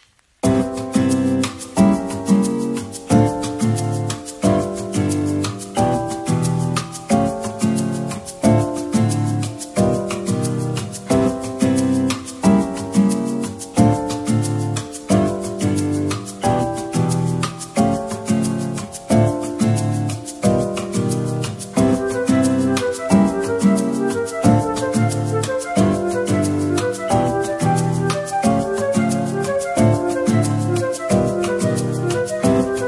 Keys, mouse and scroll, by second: 0.9-2.3 typing, 8.7 Tab, 10.1-12.0 scroll up 2, 12.0 Tab, 16.0 typing, 17.1 middle click, 20.5 shift+click, 20.7 shift+click, 21.2 shift+click, 21.4 ctrl+l, 23.4 middle click, 25.3-25.7 scroll down 1, 25.9 middle click, 30.8 z, 32.6 middle click.